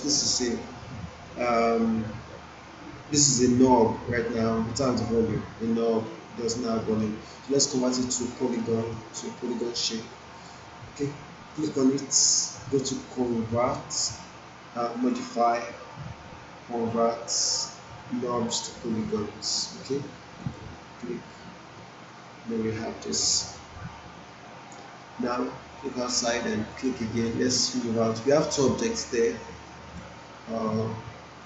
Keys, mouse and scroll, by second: 7.4 click, 8.1-9.3 right click, 9.4 click, 14.9 click, 20.3 click, 25.1-30.1 drag.